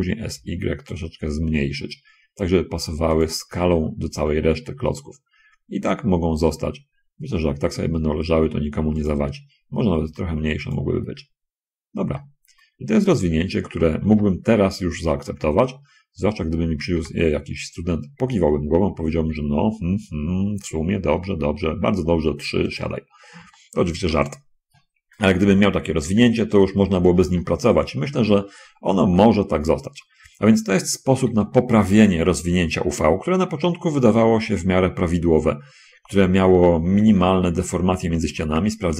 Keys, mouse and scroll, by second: 0.0 s, 0.6 y, 3.4 click, 3.7 g, 9.3 click, 10.3 s, 10.9 click, 12.1 middle click, 12.4 shift+click, 12.7 shift+middle click, 12.9 shift+scroll up 1, 14.1 a, 14.3 a, 15.7-16.7 scroll up 2, 17.3 g, 23.0 click, 23.7 shift+middle click, 25.4 a, 26.3 a, 26.7-27.1 scroll up 1, 27.7 shift+middle click, 29.4 shift+middle click, 30.6 shift+a, 37.4 t, 38.3 shift+space.